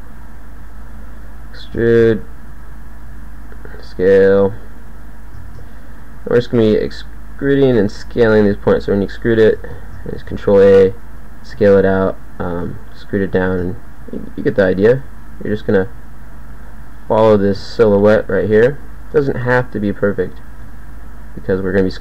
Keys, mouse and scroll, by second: 1.0 e, 1.9 ctrl+a, 3.1 g, 4.6 e, 5.5 ctrl+a, 6.7 g, 8.1 e, 10.1 ctrl+a, 11.6 g, 12.7 e, 13.5 ctrl+a, 14.1 click, 15.0 g, 15.9 g, 17.5 ctrl+a, 19.7 g, 20.7 e.